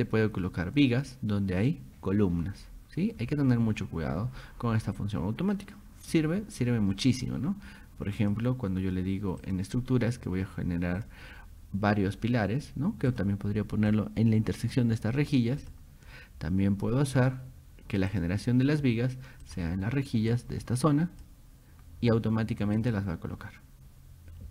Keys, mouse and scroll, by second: 3.2 scroll down 2, 6.7 middle click, 8.2 click, 9.4 click, 11.0 click, 13.1 click, 13.9 click, 15.6 click, 17.2 click, 18.1 click, 19.5 click, 20.3 click, 22.8 click.